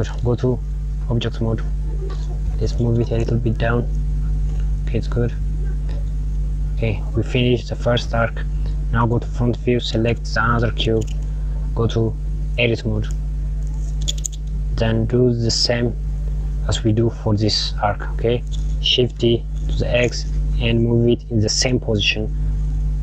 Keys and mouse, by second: 1.4 KP_Add, 2.2 g, 5.6 click, 8.9 KP_1, 10.8 click, 12.7 click, 15.3 a, 17.5 click, 19.3 click.